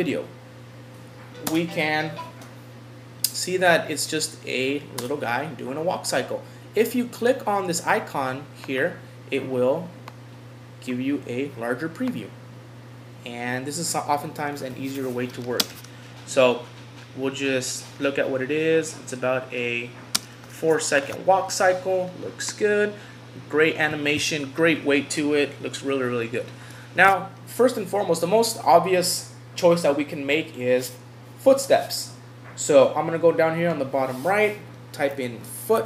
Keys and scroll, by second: 14.7 Home, 21.0 Home.